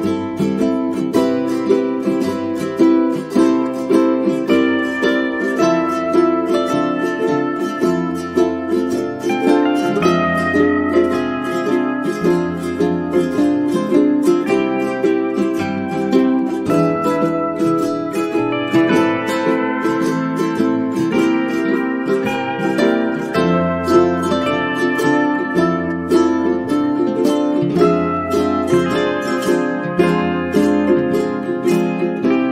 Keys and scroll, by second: 4.2 space, 10.4 space, 20.6 0, 22.4-23.4 typing, 25.9 space, 30.1 space.